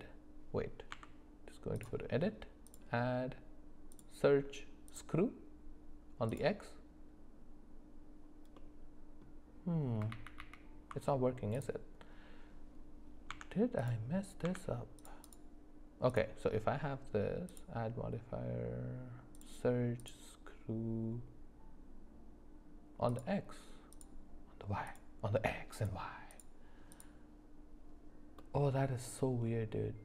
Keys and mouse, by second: 0.9 Tab, 2.8-5.0 drag, 6.3 click, 8.6 middle click, 10.1 ctrl+z, 10.4 ctrl+z, 11.5 click, 13.3 Tab, 14.4 Tab, 16.1 click, 17.6-20.1 drag, 23.1 click, 23.9 click, 24.9 click, 25.8 click, 26.3 click, 26.9 click, 28.4 middle click.